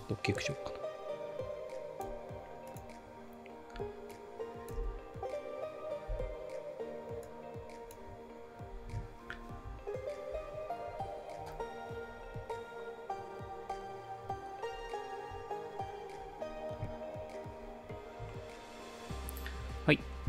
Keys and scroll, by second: 4.8 space, 6.1 space, 8.8 ctrl+s.